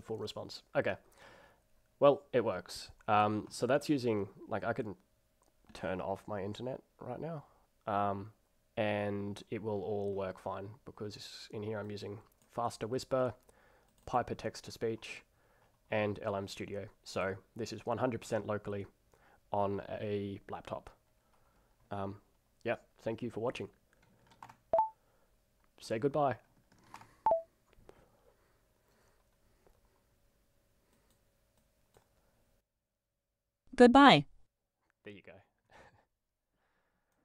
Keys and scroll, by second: 24.4 ctrl+alt+r, 26.9 ctrl+alt+r.